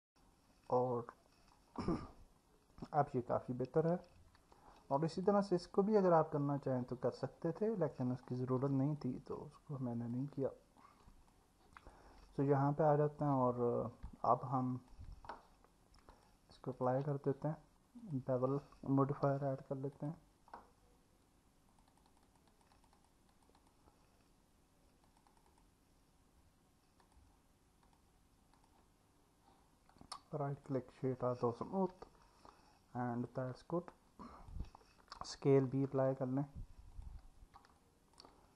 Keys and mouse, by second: 3.0 click, 4.6 Tab, 5.1 click, 9.0-10.1 alt+middle drag, 10.8 click, 11.8 click, 12.3 alt+middle click, 14.1-14.9 alt+middle drag, 16.1-16.9 drag, 18.0 click, 21.7 click, 21.9 click, 22.1 click, 22.3 click, 22.5 click, 22.8 click, 23.0 click, 23.6 click, 25.1 click, 25.3 click, 25.5 click, 27.0 click, 27.9-28.7 drag, 29.9-30.7 right drag, 32.0-33.3 alt+middle drag, 33.9 click, 35.9 ctrl+a, 37.8-38.2 alt+middle drag.